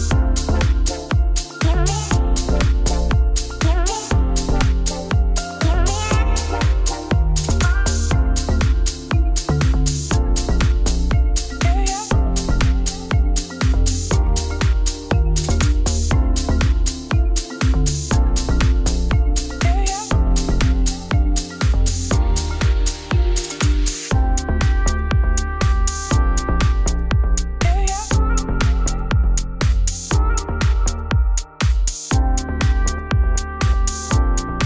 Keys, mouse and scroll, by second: 0.9 ctrl+b, 2.8-7.3 drag, 7.3 a, 8.3 Tab, 9.2 q, 10.3-11.5 shift+drag, 12.0 right click, 12.4 g, 13.8 shift+click, 14.7 scroll down 1, 14.9 middle click, 15.3-15.7 scroll up 1, 15.9 click, 16.6 middle click, 16.8 Tab, 16.9 3, 17.1 click, 17.3 g, 18.6 Tab, 18.8 scroll down 2, 19.1 middle click, 19.4 scroll up 2, 19.7 click, 20.1 shift+click, 20.8 ctrl+p, 21.0 click, 21.2 click, 21.5 shift+Return, 21.5 shift+], 22.1 click, 22.5 shift+], 22.5 shift+], 23.0 middle click, 23.6 click, 24.1 click, 24.3 shift+click, 24.5 shift+click, 25.0 ctrl+p, 25.3 click, 25.4 click, 25.9 shift+], 26.0 shift+], 26.5-28.5 scroll down 4, 28.5 alt+d, 29.3 click, 29.6 Tab, 29.8 click, 30.0 shift+s, 30.3 Tab, 30.5 click, 30.9 shift+s, 31.2 middle click, 31.9 shift+click, 32.1 KP_3, 32.7 z, 32.9-33.5 scroll up 1, 34.4 alt+d.